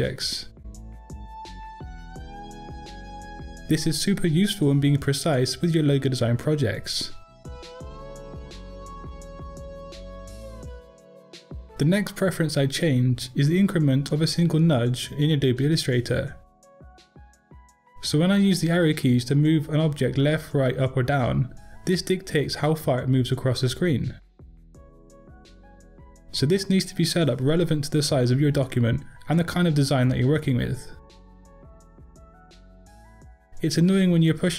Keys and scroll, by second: 29.2 m.